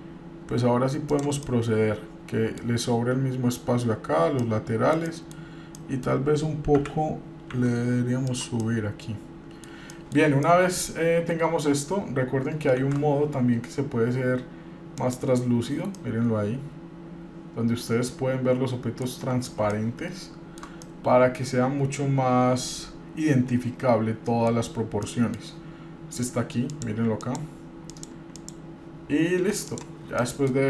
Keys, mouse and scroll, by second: 1.6-2.8 middle drag, 4.6-5.2 middle drag, 5.3 middle click, 5.9 middle click, 7.0 g, 8.8-9.9 middle drag, 10.1 middle click, 10.6 middle click, 13.0 shift+z, 15.2 click, 16.2-19.2 middle drag, 19.4-19.8 scroll down 1, 19.8-20.8 shift+middle drag, 21.0-24.7 middle drag, 25.2 middle click, 26.9 click, 28.1 click, 29.8 click, 30.4 middle click.